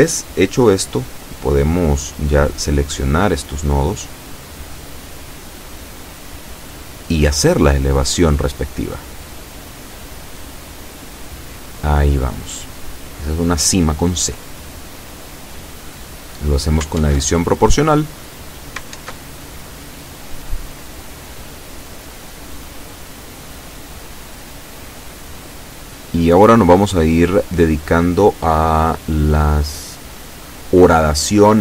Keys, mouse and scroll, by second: 1.2 a, 2.6 right click, 3.3 shift+right click, 4.2 shift+right click, 4.7 shift+right click, 5.8 shift+right click, 6.4 shift+right click, 7.9 shift+middle click, 8.2 click, 9.2 scroll down 1, 9.6 middle click, 11.0-12.2 drag, 12.2 ctrl+z, 13.0 o, 14.1-17.2 drag, 17.8 KP_7, 20.9-22.3 middle drag, 22.5-23.9 shift+middle drag, 24.1-24.7 scroll up 1, 25.6 right click, 25.9 shift+right click, 26.9 shift+right click, 27.9-29.1 shift+middle drag, 29.4 middle click.